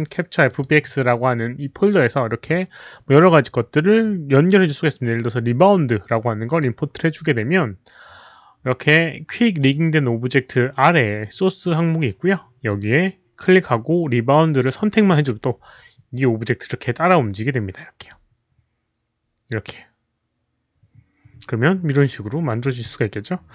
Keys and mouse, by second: 0.4 click, 5.4 right click, 5.4 click, 6.4 click, 9.1 click, 9.1 right click, 12.6 click, 12.6 right click, 15.0 click, 15.0 right click, 17.9 click.